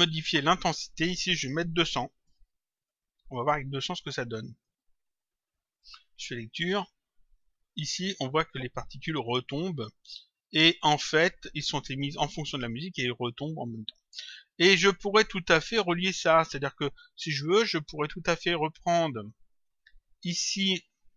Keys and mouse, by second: 0.7 click, 2.7 click, 3.8 click, 5.7 click, 15.6 click, 19.7 click.